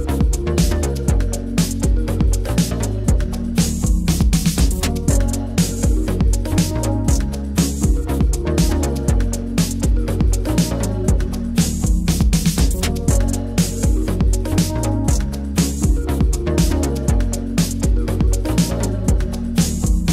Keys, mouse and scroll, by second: 2.4-4.3 drag, 7.8 click, 9.7 click, 10.1 click, 10.7 middle click, 11.2 e, 13.4 middle click, 14.1 Tab, 14.3 click, 14.6-16.0 middle drag, 16.0 click, 16.3 Tab, 17.7-20.1 drag.